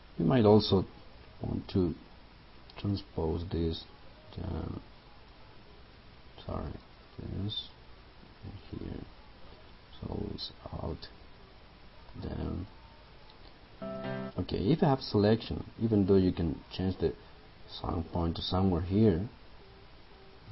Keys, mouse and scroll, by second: 6.8 right click, 8.8 click, 12.2 alt+d, 13.8 click.